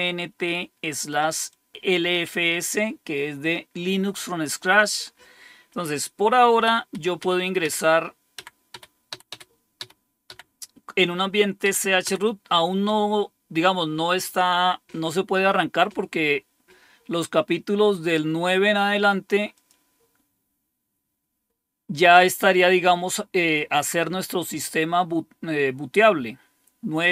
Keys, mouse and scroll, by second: 0.9 click, 1.5-2.6 drag, 2.9 click, 4.6 click, 6.5 Up, 6.9 Up, 7.2 Up, 7.6 Up, 8.3 Up, 8.7 Up, 9.1 Up, 9.3 Up, 9.8 Up, 10.2 Up, 11.6 Up, 12.0 Up, 12.8 Up, 19.5 click, 20.5-27.1 scroll down 1.